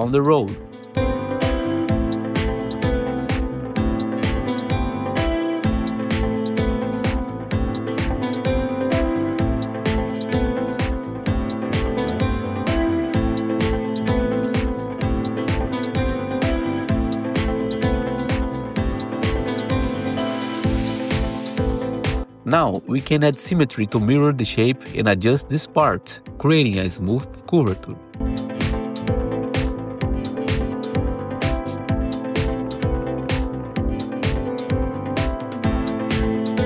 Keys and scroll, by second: 3.1 1, 12.8 ctrl+shift+w, 24.2 1, 28.2 ctrl+t, 28.7 2, 31.4 r, 33.3 2, 33.8 2, 34.3 w, 34.9 1.